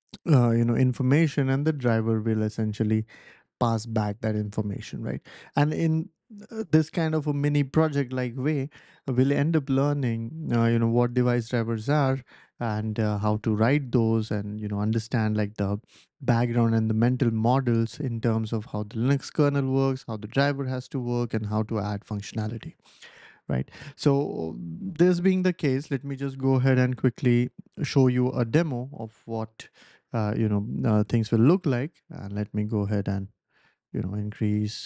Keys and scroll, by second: 25.6 BackSpace, 27.3 w, 28.1 ctrl+alt+super+p, 31.9 super+=, 32.1 super+=, 32.2 super+=, 34.0 super+=, 34.2 super+=, 34.3 super+=.